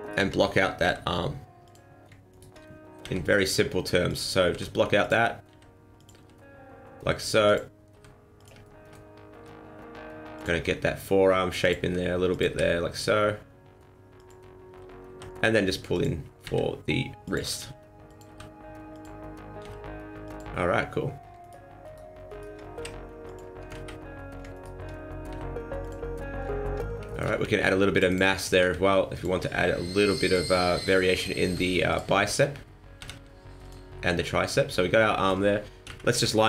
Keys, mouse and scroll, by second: 0.0 alt+right click, 0.8 r, 2.3 alt+right click, 3.0 g, 4.5 r, 5.5 s, 6.2 g, 7.9 r, 8.6 shift+middle click, 9.4 e, 10.5 s, 11.8 r, 12.5 g, 15.1 e, 16.4 s, 17.6 g, 18.2 r, 19.6 g, 21.4 alt+right click, 21.8 alt+right click, 22.2 alt+right click, 22.8 a, 22.8 s, 23.7 ctrl+z, 24.5 alt+right click, 25.3 s, 27.0 shift+middle click, 27.6 ctrl+r, 28.6 r, 29.4 s, 31.4 r, 33.0 g, 33.9 middle click, 35.8 KP_1, 36.1 KP_3.